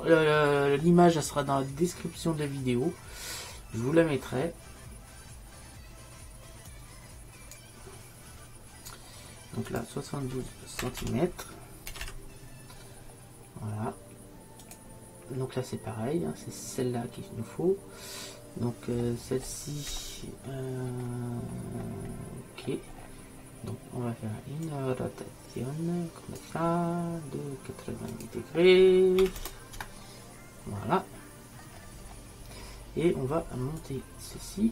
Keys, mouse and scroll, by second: 0.0-1.3 drag, 6.8-8.6 drag, 9.0 middle click, 9.8-11.6 drag, 19.0 middle click, 19.6 middle click, 22.0-23.1 middle drag, 24.7-26.7 drag, 26.7-28.2 middle drag, 28.2-30.0 drag, 30.0-32.3 middle drag, 33.9-34.7 drag.